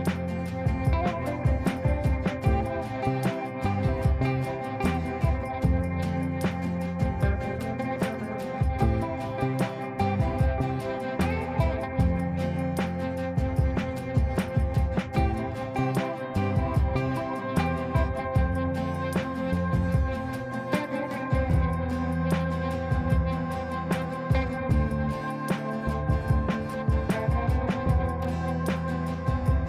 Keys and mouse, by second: 0.2 click, 3.4 shift+n, 4.3 shift+space, 5.8 shift+t, 6.6 shift+space, 7.5 shift+w, 9.8 ctrl+space, 13.0 click, 16.3 click, 20.9 F2, 21.4-22.0 drag.